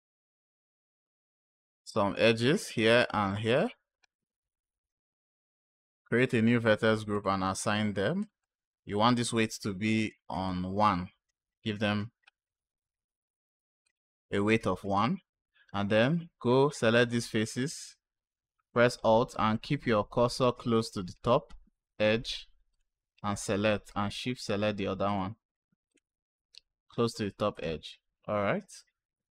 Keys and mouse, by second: 0.9 click, 1.9 click, 3.2 shift+click, 5.8 click, 7.0 click, 8.1 click, 8.3 click, 10.3 click, 13.7 click, 20.6 click, 22.6 alt+click, 24.9 alt+shift+click, 25.8 alt+shift+click, 27.4 alt+shift+click.